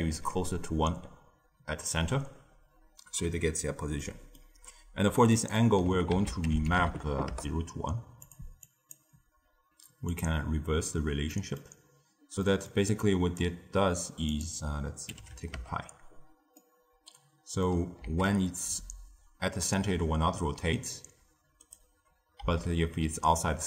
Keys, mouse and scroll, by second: 3.0 d, 3.9-6.1 middle drag, 6.1 ctrl+a, 8.6 click, 10.0 click, 11.2-13.0 middle drag, 13.0 click, 14.2-16.5 drag, 16.5-18.0 middle drag, 18.0 s, 22.3 s.